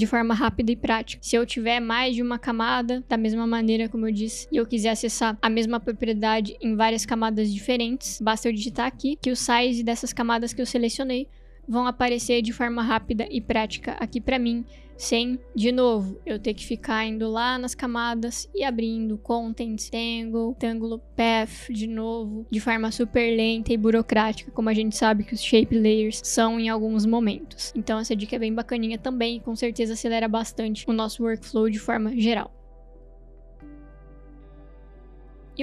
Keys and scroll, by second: 1.3 Delete, 3.2 ctrl+d, 8.1-9.2 typing, 17.0 BackSpace.